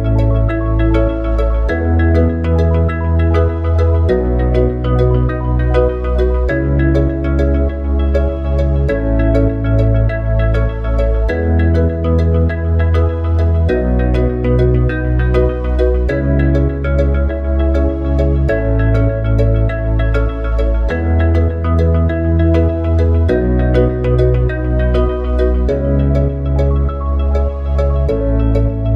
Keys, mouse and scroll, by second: 1.1-4.2 drag, 8.4-11.4 drag, 12.9-16.1 drag, 19.4 ctrl+z, 20.1 ctrl+z.